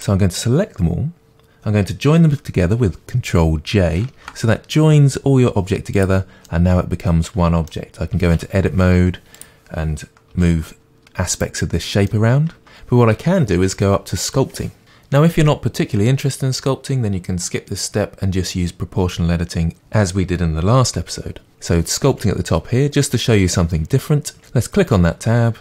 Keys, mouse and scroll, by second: 4.2 ctrl+j, 5.9-6.5 drag, 6.5-9.4 middle drag, 8.4 Tab, 9.4 click, 10.3 g, 11.4 right click, 12.1-25.6 middle drag.